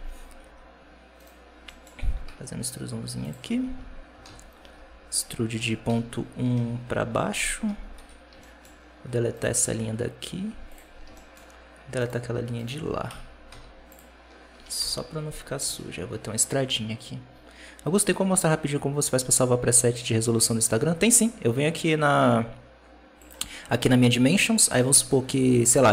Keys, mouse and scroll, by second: 0.4 3, 1.0 right click, 1.3 scroll up 1, 1.6 middle click, 1.9 e, 4.1 ctrl+z, 4.6 e, 7.8 2, 8.0-9.2 scroll up 3, 8.3 shift+middle click, 9.2 right click, 9.5 x, 10.8 scroll down 1, 11.0 shift+middle click, 11.9-13.0 right drag, 13.0 KP_Decimal, 13.4 x, 14.1-14.5 scroll down 6, 14.5 Tab, 14.6 KP_0, 15.5 alt+a, 23.1 click.